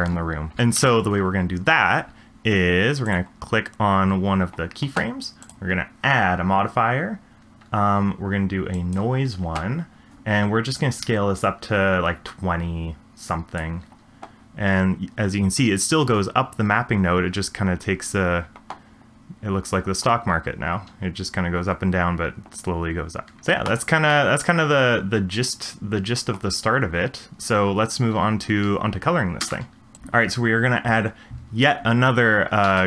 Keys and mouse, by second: 0.6 space, 0.7 shift+Left, 3.0 click, 5.6-9.0 drag, 10.7-13.7 drag, 23.4 space, 24.2-26.4 middle drag, 29.5 space, 32.6 shift+a.